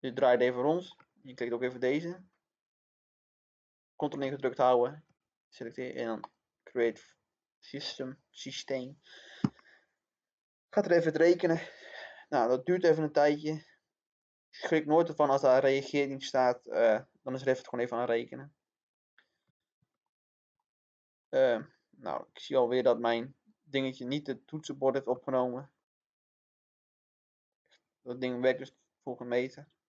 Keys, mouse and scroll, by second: 4.7 click, 20.0 middle click, 21.0 scroll down 1, 21.1 middle click, 24.1 click, 25.2 middle click.